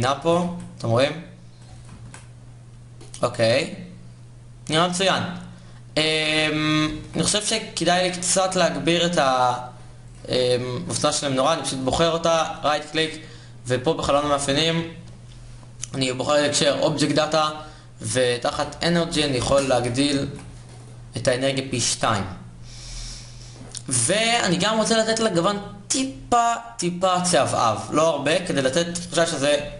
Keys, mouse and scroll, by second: 1.7 shift+z, 6.5 shift+z, 19.9 shift+z.